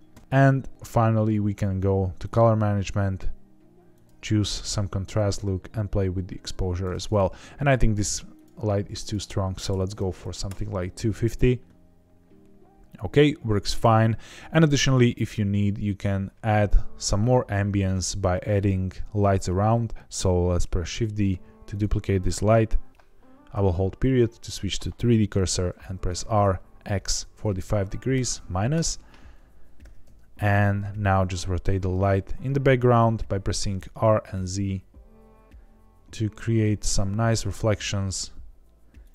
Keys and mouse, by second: 2.2 click, 5.2 click, 8.3 click, 9.0 click, 20.8 shift+d, 21.6 right click, 23.5 ., 26.1 r, 26.4 x, 27.3 KP_4, 27.4 KP_5, 28.1 KP_Subtract, 28.7 KP_Enter, 29.8 r, 30.0 z, 39.0 click.